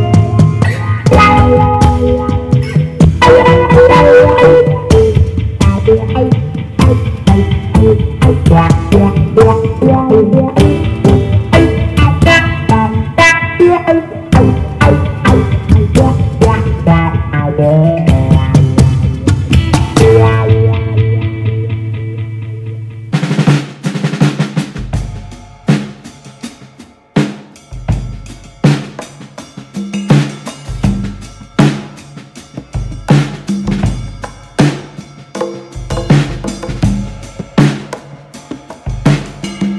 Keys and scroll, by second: 6.7 super+d.